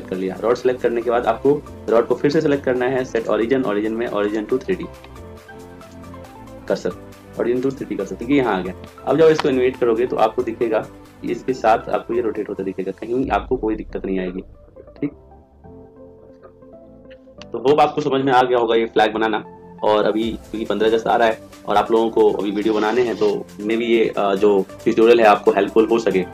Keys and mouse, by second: 1.7-3.0 right drag, 3.0 click, 5.7 click, 10.2 click, 11.8-12.9 right drag, 17.6-20.8 middle drag.